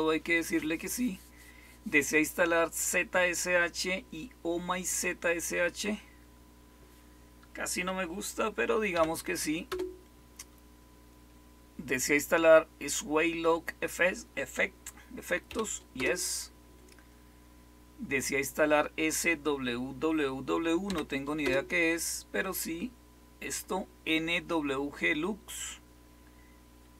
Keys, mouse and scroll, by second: 8.9-9.6 typing, 15.4-15.9 typing, 20.8 typing, 21.4 Return.